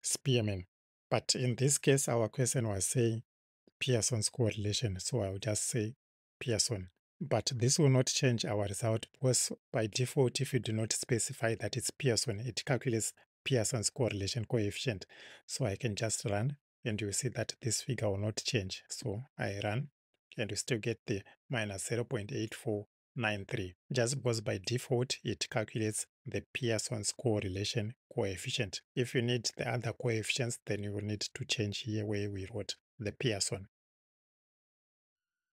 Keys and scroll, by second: 8.2 Right.